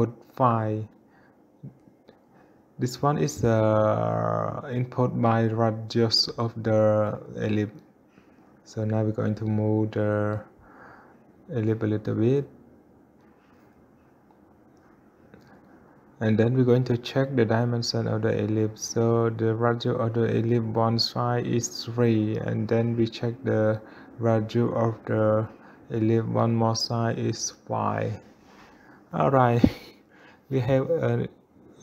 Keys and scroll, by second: 6.6 Return, 7.0 3.